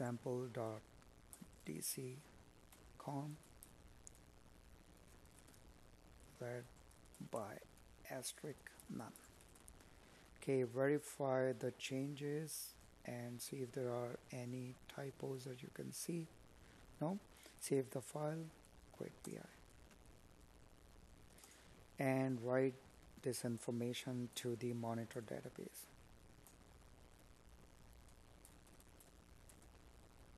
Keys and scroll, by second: 0.0 space, 2.0 Escape, 5.3 Left, 7.8 space, 16.0 Up, 21.9 Tab.